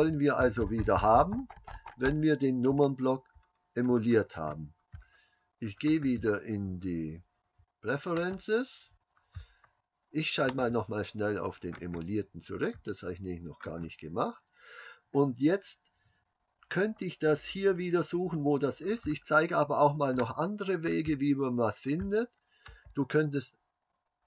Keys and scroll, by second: 0.1-1.9 KP_Subtract, 2.1 KP_Subtract.